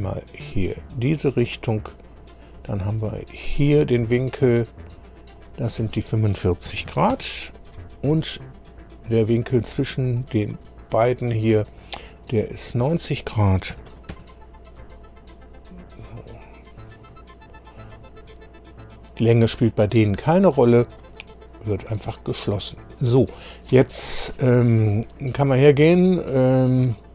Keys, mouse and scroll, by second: 0.5 click, 1.2 click, 1.5 right click, 2.4 click, 3.4 click, 5.4 click, 6.7 KP_4, 6.9 KP_5, 7.1 Return, 9.5 click, 10.4 click, 12.5 click, 13.7 KP_9, 13.9 KP_0, 14.1 Return, 16.1-17.1 drag, 20.9 click, 24.0-24.3 scroll down 2.